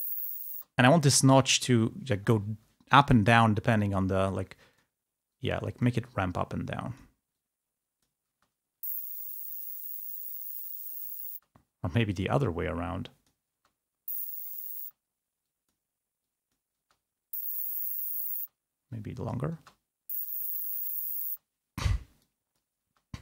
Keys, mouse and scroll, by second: 0.0 click, 0.7 space, 1.5 click, 3.4 click, 4.8 click, 5.6 click, 6.5 click, 7.5 click, 8.4 space, 11.5 space, 12.5-13.5 drag, 13.7 space, 15.0 space, 15.5 click, 16.3 click, 16.9 space, 19.2 click, 19.9 space, 21.4 space, 22.3 click, 22.9 space.